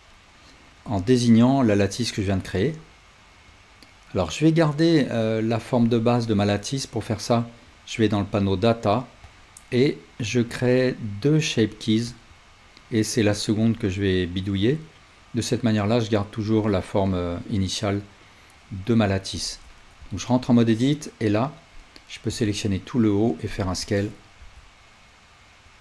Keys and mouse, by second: 3.5 click, 7.7 click, 9.2-13.7 drag, 20.2 Tab, 20.7-23.4 drag, 22.3 s, 23.9-25.8 drag, 24.4 s.